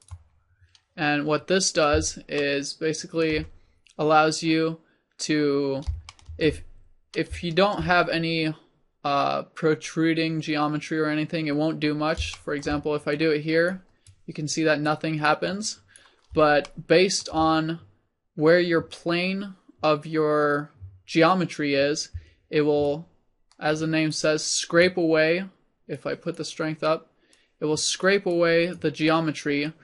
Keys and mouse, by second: 6.8 click, 11.8 click, 12.4 middle click, 13.2-16.4 drag, 19.8-22.9 middle drag, 22.9-29.8 drag.